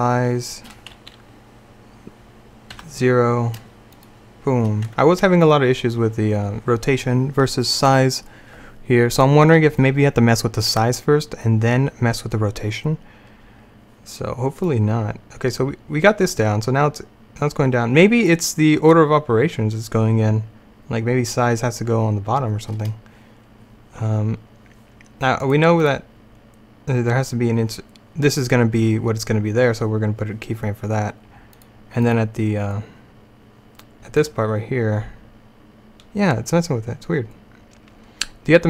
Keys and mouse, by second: 5.0 Tab, 14.7-18.5 drag, 23.2 middle click, 31.6-34.0 drag, 34.3-38.6 drag.